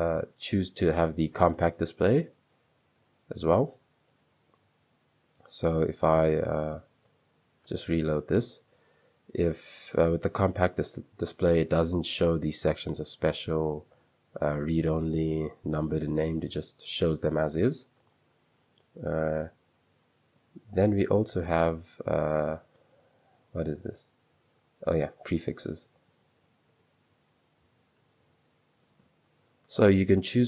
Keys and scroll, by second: 0.1-1.1 typing, 1.3 Return, 2.6 super+2, 3.0 super+2, 6.9-7.2 typing, 8.3-9.3 typing, 10.5 shift+', 20.7 Escape, 21.4 super+2, 23.2-29.4 typing, 28.4 Escape.